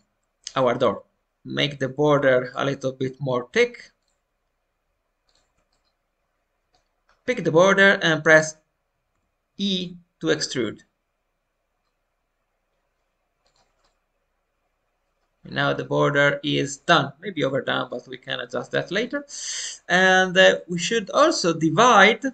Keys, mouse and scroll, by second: 1.2 middle click, 1.2 click, 1.2-1.6 scroll down 1, 2.4-3.4 shift+drag, 3.9-5.6 shift+drag, 5.6-7.0 middle drag, 7.0-8.4 scroll up 1, 9.0 e, 13.7-20.0 middle drag, 20.0 click, 20.5 middle click, 21.3 alt+scroll up 1, 21.6 scroll down 2, 21.9 middle click.